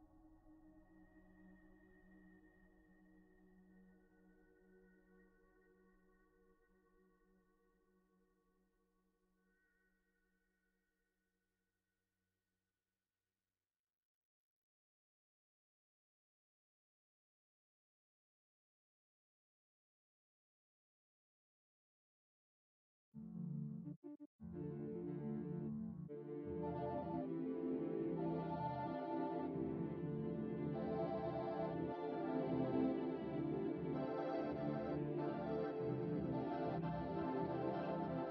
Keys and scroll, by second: 27.1 shift+s, 27.4 shift+s, 27.8 shift+s, 29.4 shift+s, 30.1 shift+s, 30.5 shift+s.